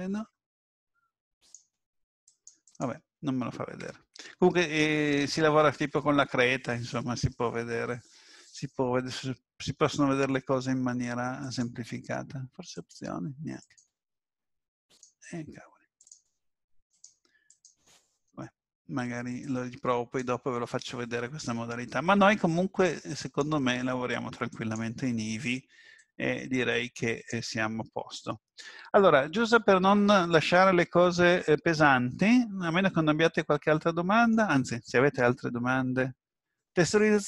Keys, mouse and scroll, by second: 1.4 click, 2.6 click, 3.8 Tab, 12.7 click, 14.9 click, 23.2 click, 27.9-28.5 scroll down 2, 31.5-32.1 scroll down 1, 32.1 middle click, 32.1 scroll down 1.